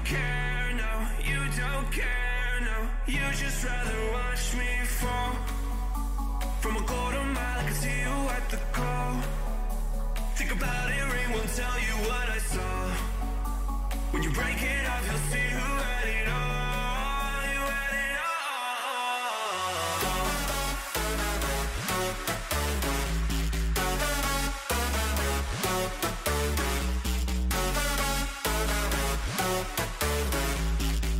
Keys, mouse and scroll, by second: 1.8-3.8 middle drag, 3.8 g, 4.1 middle click, 7.9-11.7 middle drag, 8.4 a, 11.2 b, 13.7 g, 23.9-25.4 middle drag, 24.4 a, 25.9 middle click, 27.1 middle click, 28.7 a, 29.0 a, 30.6 ctrl+r.